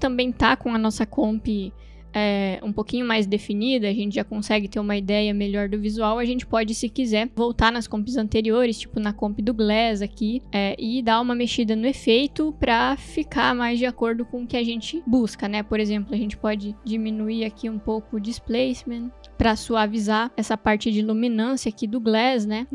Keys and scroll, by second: 8.5 space.